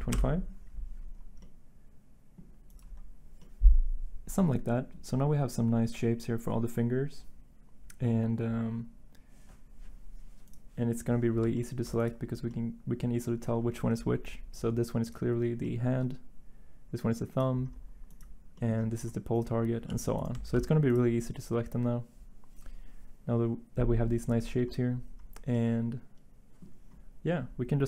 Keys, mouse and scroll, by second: 0.1 Return, 1.4 typing, 4.6 typing, 19.8 g, 20.5 ctrl+z.